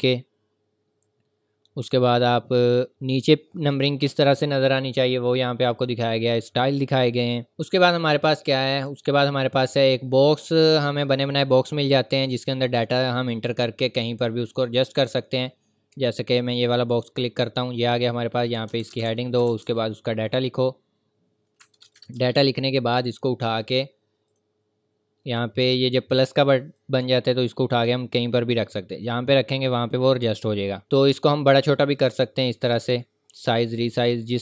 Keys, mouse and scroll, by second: 2.9-5.2 scroll down 1, 7.5 click, 7.5 scroll up 1, 8.8 click, 11.6-13.9 scroll down 1, 13.9-16.2 scroll up 1, 16.9 click, 18.5-19.6 typing, 19.3 click, 20.3 scroll down 1, 20.6 scroll up 1, 21.3-21.6 scroll down 1, 21.4-22.9 typing, 22.7 click, 26.7 click, 31.1 click.